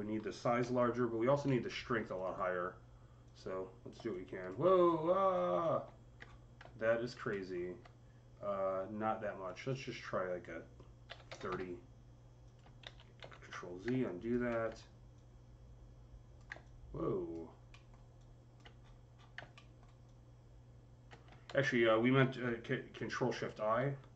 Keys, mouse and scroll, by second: 0.2-2.0 typing, 0.5-3.1 drag, 3.1-4.7 drag, 4.7 scroll up 6, 5.2 scroll down 6, 6.1-6.8 alt+scroll down 4, 6.8 click, 7.1 alt+middle click, 9.3 click, 9.8-11.3 drag, 10.9 KP_3, 11.1 KP_0, 11.3 Return, 12.3 click, 12.7 ctrl+z, 13.1 ctrl+z, 13.9 alt+click, 14.3 alt+middle click, 15.0-18.0 alt+drag, 17.7 alt+middle click, 17.7 alt+scroll up 1, 18.0 alt+click, 18.6-19.2 alt+scroll up 10, 19.3 alt+middle click, 19.9-24.1 alt+drag, 21.3 ctrl+z, 23.6 shift+i.